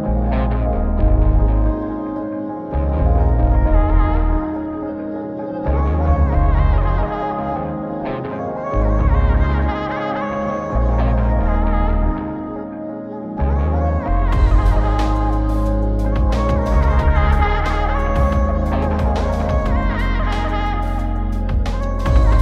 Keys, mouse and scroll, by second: 5.3 click, 5.8 click, 9.9 click, 12.0-16.5 drag, 15.6 BackSpace, 17.8 click, 18.4 click, 21.0 click, 21.8 click.